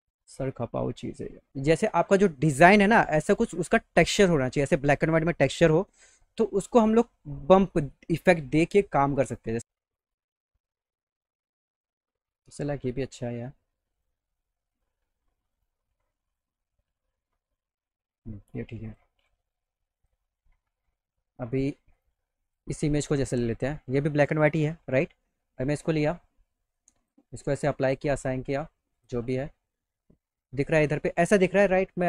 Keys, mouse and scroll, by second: 6.4 middle click, 9.3 right click, 9.9 right click, 12.7 scroll down 2, 13.1 click, 14.0 click, 14.8 click, 15.5 click, 16.3 click, 18.9 click, 20.0 click, 22.0 click, 22.5 click, 23.4 click, 26.8 click, 27.9 click, 29.0 click.